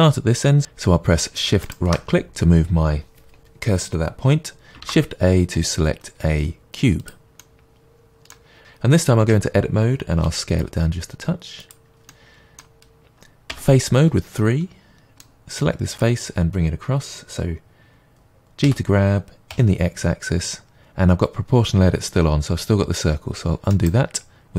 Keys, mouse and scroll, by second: 1.7-4.8 shift+right drag, 4.8 shift+a, 7.4-8.6 middle drag, 8.6 right click, 9.2 Tab, 10.2 s, 11.7 click, 12.1-15.9 middle drag, 13.5 3, 15.9 click, 18.6 g, 23.8 right click.